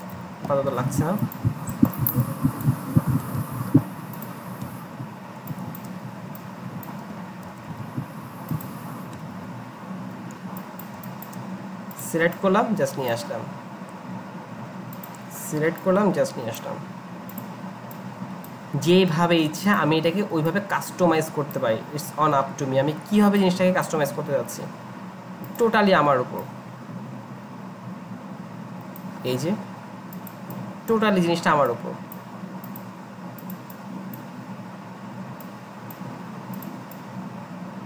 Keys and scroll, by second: 0.0 Delete, 0.1 Delete, 3.2 Delete, 3.4 Delete, 4.6 Delete, 7.6 Delete, 7.7 Delete, 9.2 Delete, 9.3 Delete, 9.4 Delete.